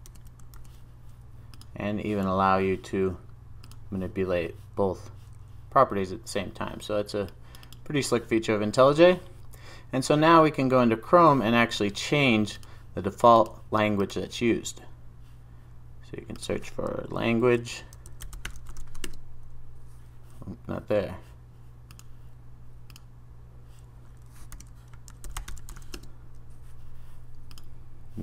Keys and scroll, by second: 0.1 super+v.